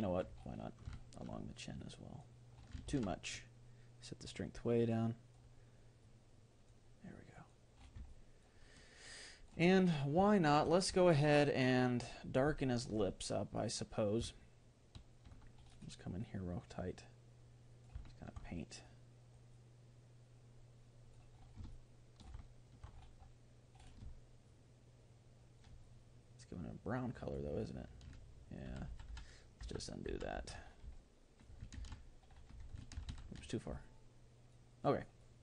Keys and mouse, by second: 1.8-3.4 drag, 2.4 middle click, 3.0 ctrl+z, 4.0-5.6 drag, 6.0-9.0 drag, 8.1-13.4 middle drag, 14.4-16.2 middle drag, 16.2-18.5 drag, 18.1-20.0 middle drag, 18.9-21.3 drag, 21.8-27.3 middle drag, 25.8-27.5 drag, 28.7 ctrl+z, 29.2 ctrl+z, 29.6 ctrl+z, 30.1 ctrl+z, 30.4 ctrl+z, 31.0-33.4 middle drag, 31.8 ctrl+z, 33.4 ctrl+shift+z, 33.8-35.4 middle drag.